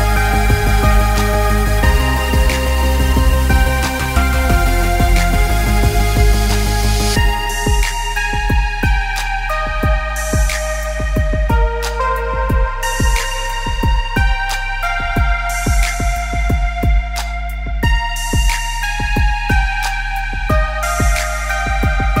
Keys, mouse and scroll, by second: 0.9 Tab, 1.3 middle click, 1.9 click, 2.1 middle click, 2.7 click, 3.1 click, 4.3 click, 5.5-5.9 scroll down 1, 6.0 click, 7.5 ctrl+z, 8.4 click, 9.4 click, 10.1 click, 10.8 click, 11.3 click, 11.9 x, 12.4 middle click, 13.0 middle click, 13.4 scroll down 1, 13.7 middle click, 14.1 scroll down 4, 14.3 middle click, 16.3 scroll up 5, 16.5 click, 17.3 g, 19.5 g, 20.9 middle click, 22.0-22.2 scroll down 3.